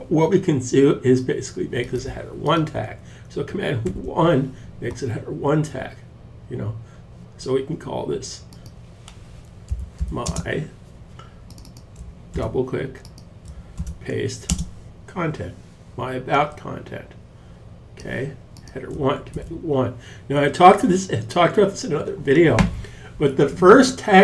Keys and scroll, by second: 3.3 super+1, 8.9-9.8 typing, 11.2-11.9 typing, 13.2 super+v, 13.9 space, 18.8 super+1.